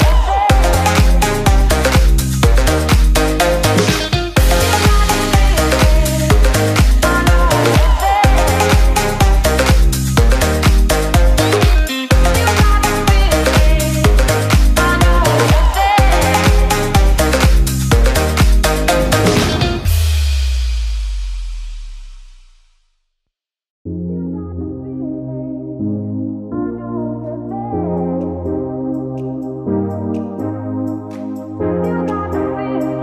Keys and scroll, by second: 0.1 ctrl+space, 10.4 ctrl+space, 18.1 ctrl+space, 29.6 ctrl+space.